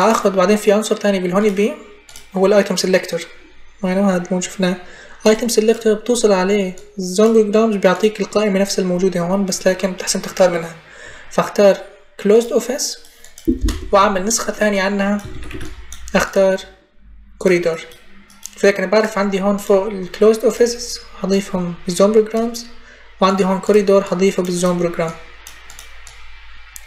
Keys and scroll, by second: 13.8 Up, 14.2 Delete, 15.1 ctrl+c, 15.9 ctrl+v.